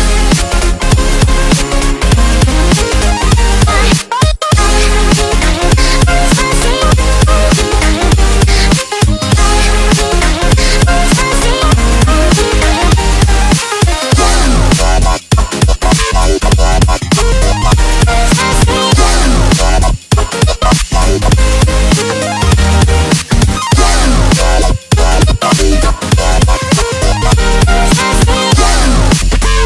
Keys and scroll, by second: 0.3 x, 2.7 x, 3.5 space, 5.0 space, 5.8 space, 5.9 z, 7.1 z, 8.7 space, 9.1 x, 10.4 space, 10.7 x, 12.6-14.4 typing, 16.1-29.6 typing, 29.2 ctrl+space.